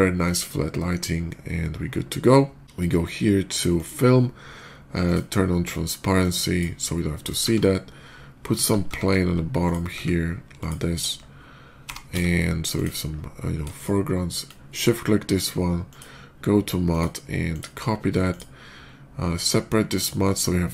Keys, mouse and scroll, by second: 0.7 middle click, 0.8 middle click, 3.6 click, 4.0 middle click, 4.9 click, 6.1 click, 7.3 shift+a, 8.5 shift+a, 9.5 click, 9.5 shift+a, 9.8 s, 10.4 click, 11.7 g, 12.1 z, 12.1 middle click, 12.6 click, 13.6 shift+click, 15.7 shift+click, 16.7 shift+click, 17.4 click, 17.9 middle click, 18.1 click, 19.8 click.